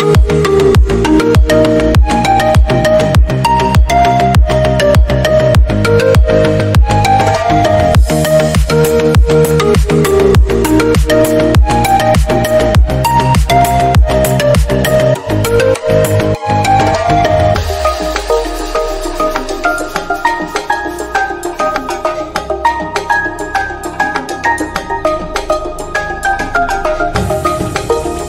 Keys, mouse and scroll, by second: 0.1 KP_7, 0.5 scroll up 2, 0.8 shift+middle click, 1.3 g, 1.9 click, 2.0 g, 2.9 shift+middle click, 3.2-3.5 drag, 3.5 g, 4.5-5.0 middle drag, 5.0 click, 5.4 middle click, 5.9 click, 6.6 middle click, 7.1 g, 7.7 drag, 7.9-8.3 middle drag, 8.8 middle click, 9.2 click, 9.4-10.2 middle drag, 10.2 click, 11.0 g, 11.6 click, 11.8 scroll down 3, 11.8-12.4 middle drag, 12.4-12.8 scroll up 1, 12.8-13.1 middle drag, 13.1 click, 13.3-14.2 middle drag, 14.2 g, 14.7 scroll down 1, 14.8 middle drag, 15.0 scroll up 2, 15.2 click, 15.9-18.0 middle drag, 18.0 click, 18.3 middle click, 18.8 click, 19.2-19.5 middle drag, 19.5 click, 20.0 g, 21.0 scroll down 1, 21.1 drag, 21.3 scroll up 1, 21.5 middle click, 21.8 scroll down 1, 22.0 scroll up 1, 22.2 middle drag, 22.4 click, 22.5 g, 23.3 click, 23.4 scroll down 3, 23.5-24.6 middle drag, 24.6 drag, 24.8 scroll up 2, 25.0-25.6 shift+middle drag, 25.6 shift+d, 26.4 middle click, 26.8 scroll down 3, 26.8-27.1 middle drag, 27.1 scroll up 1, 27.3 middle drag, 27.4 drag, 27.7-28.2 middle drag.